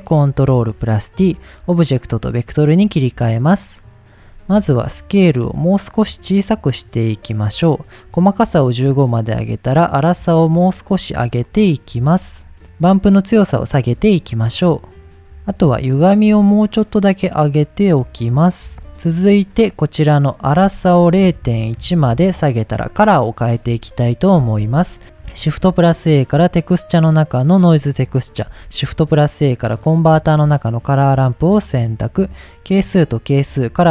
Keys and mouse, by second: 1.1-1.7 drag, 4.8-7.1 drag, 8.3 click, 9.2-11.6 drag, 12.9-15.2 drag, 16.4-18.7 shift+drag, 18.9 middle click, 20.3-22.8 drag, 23.9 middle click, 28.6 shift+a, 31.2-32.1 drag, 32.7-33.4 drag.